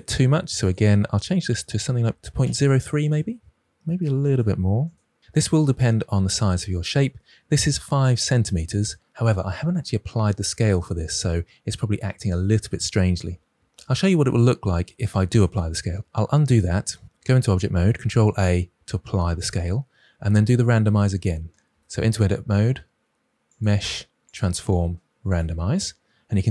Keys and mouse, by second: 0.6-3.0 drag, 4.2 click, 4.8 click, 16.0 ctrl+Escape, 16.0 ctrl+z, 17.1 Tab, 18.0 ctrl+a, 21.5 ctrl+z, 21.6 Tab, 23.6-25.3 drag.